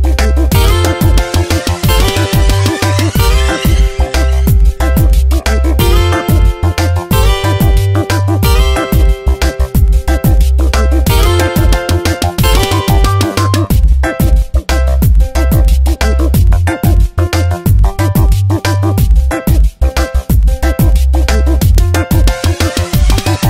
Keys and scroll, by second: 9.2 Return, 9.8 v, 11.0 ctrl+z, 17.4 ctrl+Return, 18.0 Delete, 18.5 ctrl+d, 18.8 v.